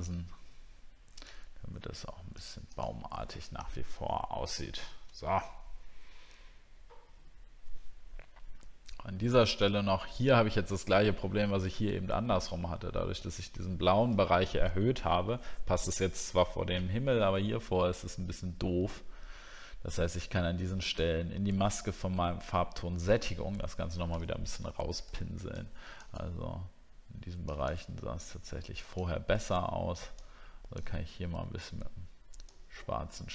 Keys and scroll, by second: 4.1 alt+scroll down 1, 16.0 alt+scroll up 1.